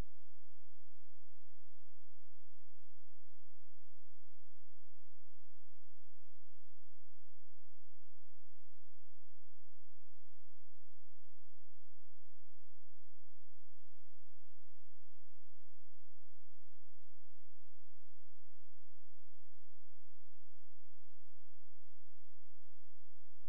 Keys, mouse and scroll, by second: 0.8 click, 1.8 ctrl+space, 3.6 click, 11.3 shift+click, 18.0 right click, 18.7 click, 19.2 scroll down 1, 20.3 click, 20.7-21.1 scroll down 1, 21.1-21.8 scroll up 1, 21.8-22.3 scroll down 1, 22.3-23.4 scroll up 1.